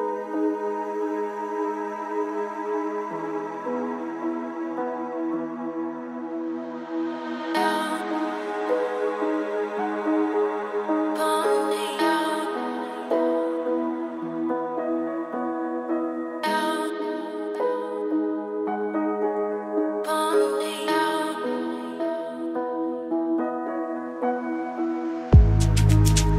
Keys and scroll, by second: 7.7 ctrl+shift+], 9.5 ctrl+shift+o, 12.4 ctrl+space.